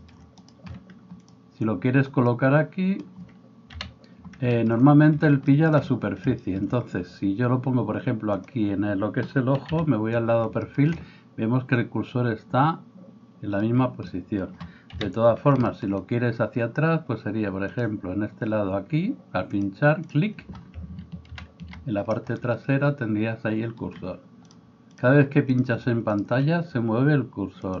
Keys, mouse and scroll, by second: 1.3-8.3 middle drag, 3.7 KP_1, 8.3 click, 9.0-17.7 middle drag, 9.7 KP_3, 14.9 KP_3, 17.7 click, 17.9-19.5 middle drag, 19.5-20.8 drag, 20.8-24.9 ctrl+middle drag, 21.4 ctrl+KP_1, 24.9 click, 25.1-27.8 middle drag.